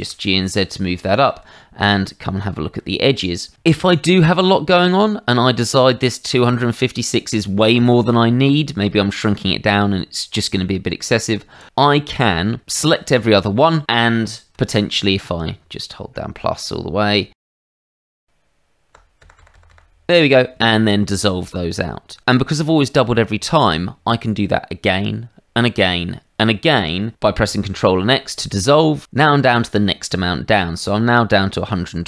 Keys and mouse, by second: 0.6 click, 1.0 shift+middle click, 1.6 Tab, 11.6 click.